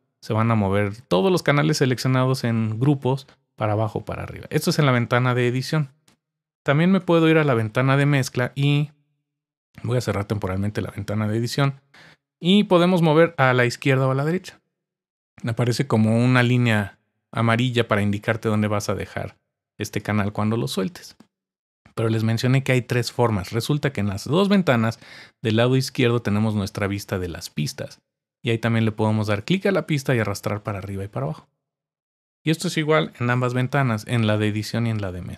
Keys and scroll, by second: 7.0 super+=, 33.3 super+=.